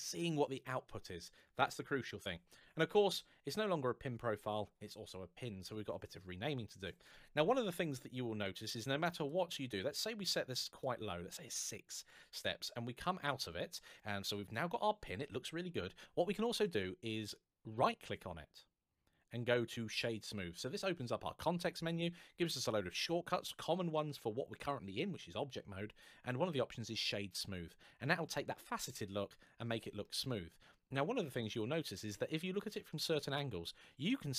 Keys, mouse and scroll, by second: 8.5 click, 12.1 Tab, 13.8 middle click, 16.4 right click, 26.8 click, 29.8 middle click, 33.7 middle click.